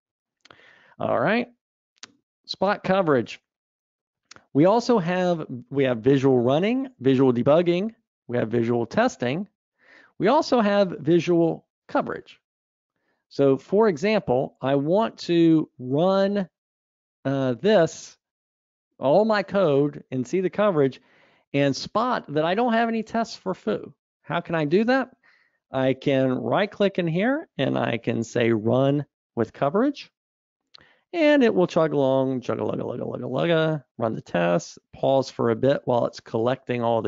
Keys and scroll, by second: 0.7 super+Up.